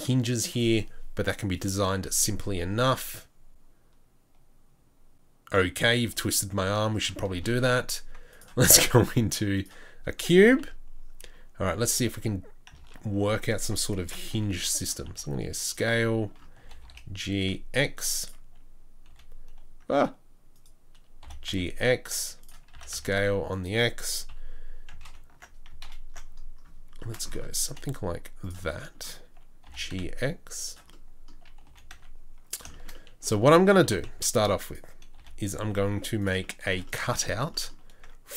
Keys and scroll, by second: 7.3 shift+a, 10.6 KP_3, 11.2 KP_1, 12.0 KP_3, 14.0 Tab, 14.3 g, 15.1 s, 16.6 g, 19.1 g, 21.2 g, 22.7 s, 24.3 KP_3, 27.7 g, 29.7 g, 31.7 g, 33.8 s, 35.2 g.